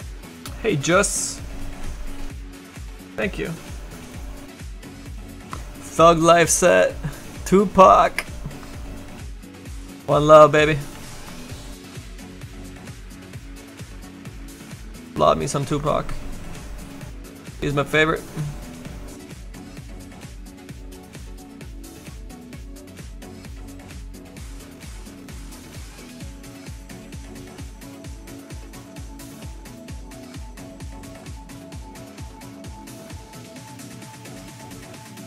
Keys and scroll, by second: 10.5 s, 11.0 s, 17.5 s, 20.1 s, 26.4 s.